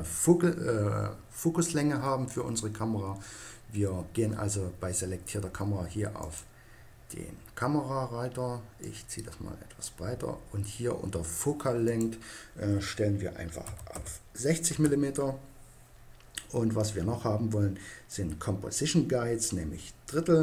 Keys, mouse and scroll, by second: 6.2-8.0 drag, 8.9-10.6 drag, 11.9-13.6 drag, 18.1-19.9 drag.